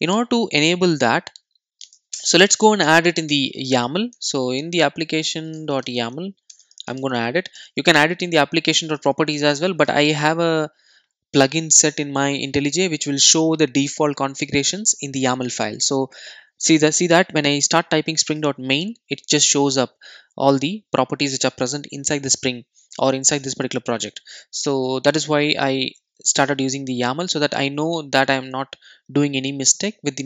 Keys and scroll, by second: 1.6 super+a, 2.9 super+n.